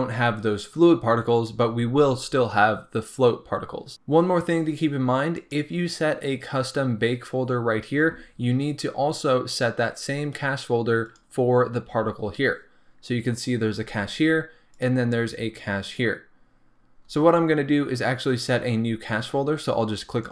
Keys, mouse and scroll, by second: 5.3 click, 11.0 click, 14.7 click, 15.6-19.6 scroll down 1, 20.2 click.